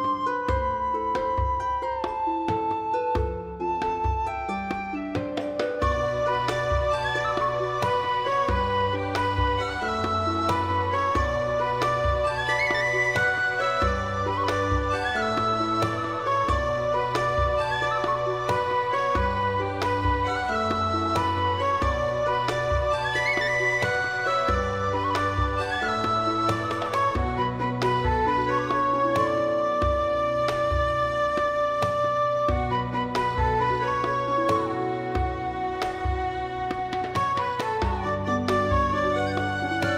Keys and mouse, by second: 0.0 click, 0.5 alt+middle click, 0.7 alt+middle click, 0.9 alt+middle click, 1.0 alt+middle click, 1.2 shift+middle click, 1.8 shift+middle click, 2.1 g, 2.3 f, 3.5 right click, 3.8 g, 4.5 click, 4.8 click, 4.9 g, 5.3 click, 5.5 click, 5.8 g, 6.5 click, 7.0 g, 7.6 click, 7.8 click, 8.0 g, 8.7 click, 9.3 g, 9.9 click, 10.2 middle click, 10.4 g, 11.1 click, 11.3 middle click, 11.4 alt+middle click, 11.6 alt+middle click, 12.1 shift+middle click, 12.3 g, 12.6 click, 12.8 click, 13.1 g, 13.6 click, 14.1 click, 14.2 middle click, 14.6 g, 16.1 click, 16.4 click, 16.6 alt+z, 16.8 middle click, 17.2 click, 17.4 g, 18.2 click, 18.5 click, 18.7 g, 19.1 click, 19.4 alt+z, 19.5 shift+middle click, 19.7 alt+middle click, 19.7 alt+click, 20.1 shift+click, 20.4 click, 20.8 alt+z, 21.1 g, 21.8 click, 22.3 g, 22.7 click, 22.8 click, 23.0 g, 23.7 click, 24.0 alt+z, 24.1 alt+middle click, 24.9 g, 25.2 click, 25.6 g, 25.8 click, 26.2 alt+middle click, 26.3 alt+middle click, 26.5 shift+middle click, 27.2 shift+middle click, 27.7 g, 28.3 click, 28.7 g, 28.9 click, 29.2 g, 29.5 click, 29.8 g, 30.1 click, 30.3 click, 30.4 middle click, 31.0 alt+click, 31.4 shift+middle click, 32.0 g, 32.9 click, 33.1 click, 33.2-37.1 typing, 33.6 click, 34.3 click, 34.8 click, 35.3 click, 35.5 click, 36.1 click, 36.4 click, 36.7 click, 37.7 click, 38.2 click, 38.4 g, 39.4 click, 39.6 middle click, 39.8 alt+middle click.